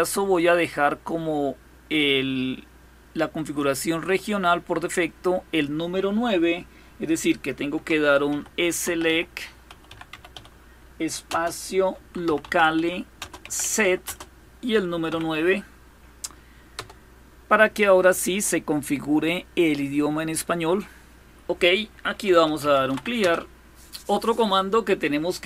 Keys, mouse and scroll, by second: 0.0-3.9 drag, 7.9-14.7 typing, 16.4 Return, 21.7-23.0 typing.